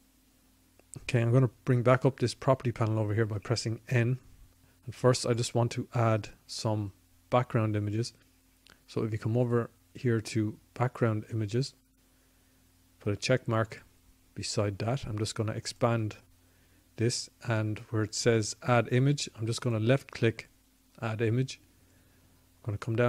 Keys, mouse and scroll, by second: 2.0 n, 4.1-5.2 drag, 12.4-16.1 drag, 18.4-20.1 drag, 23.0 click.